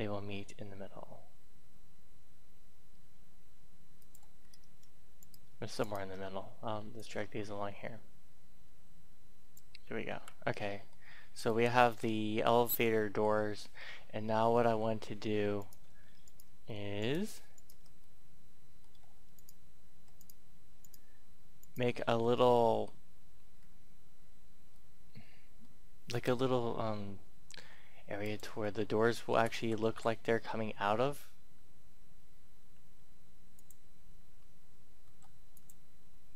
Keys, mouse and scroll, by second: 4.0 click, 4.3-5.2 scroll up 1, 5.2 right click, 5.8 shift+right click, 6.9-9.9 drag, 9.9 scroll down 1, 10.5 middle click, 11.5 shift+middle click, 12.4-13.5 middle drag, 14.4 a, 15.5 right click, 16.2 shift+right click, 17.0 shift+right click, 17.6 shift+right click, 18.0 middle click, 19.3 shift+right click, 20.2 shift+right click, 20.8 shift+right click, 21.6 shift+right click, 22.3 scroll down 1, 22.5 middle click, 23.5 scroll up 1, 23.7-24.7 scroll down 1, 24.7 middle click, 27.7 e, 27.9 click, 29.1-30.3 typing, 33.5 click, 34.8 e, 35.5 click.